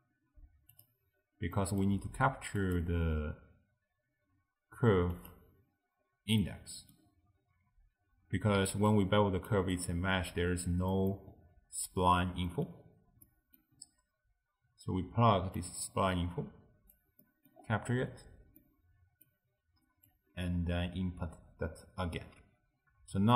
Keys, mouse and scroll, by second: 1.2-1.6 scroll up 2, 1.6 middle click, 1.9-2.6 scroll up 1, 2.6-5.7 drag, 6.1-6.4 scroll down 1, 6.4 middle click, 7.1-8.1 scroll up 1, 8.1-8.7 scroll up 2, 8.7-10.4 typing, 8.9 click, 9.8 right click, 10.9 middle click, 11.4-12.5 scroll down 1, 12.5 middle click, 12.9-13.3 scroll down 1, 13.3-13.8 middle drag, 13.8-15.6 scroll down 4, 15.6 click, 17.3 middle click, 17.6-18.5 scroll up 10, 18.6-20.2 middle drag, 20.2 click, 22.7-23.2 scroll down 2.